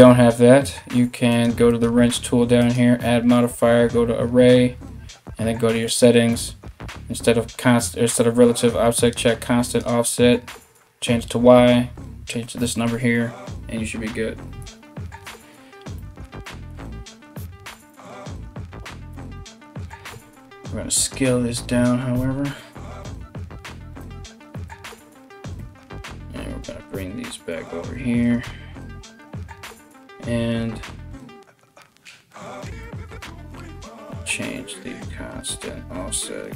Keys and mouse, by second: 0.9 click, 1.1 middle click, 1.3 click, 1.4 middle click, 2.2-20.7 drag, 12.4 x, 14.3 ctrl+z, 18.7 Tab, 19.7 s, 20.7-36.5 middle drag, 21.8 s, 23.2 s, 25.2 KP_7, 26.2 g, 29.3-36.5 drag.